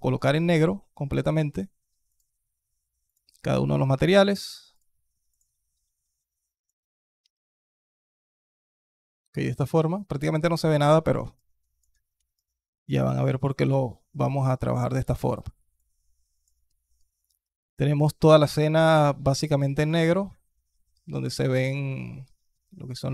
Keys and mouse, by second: 1.9 click, 4.5 click, 5.1 click, 6.5 click, 11.2-11.6 alt+drag, 12.2 alt+click, 13.2 alt+click, 14.2 alt+click, 14.6 alt+click, 15.6-16.3 alt+drag, 16.5 alt+click, 19.3-19.7 alt+drag.